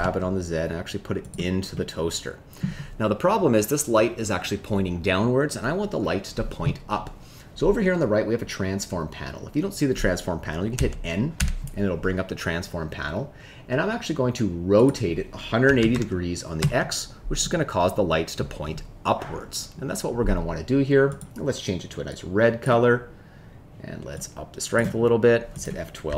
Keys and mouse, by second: 1.2 click, 1.7 middle click, 10.7 n, 11.3 n, 14.9-16.6 drag, 21.0 click, 24.2 click.